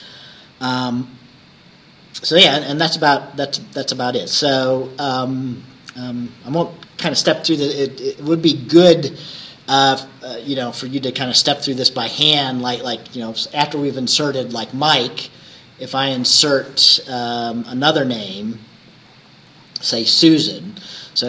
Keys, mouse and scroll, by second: 16.9-17.7 scroll down 4, 18.1-18.4 scroll down 2, 19.1-19.9 scroll up 2, 20.2 scroll up 1, 20.8 scroll up 1.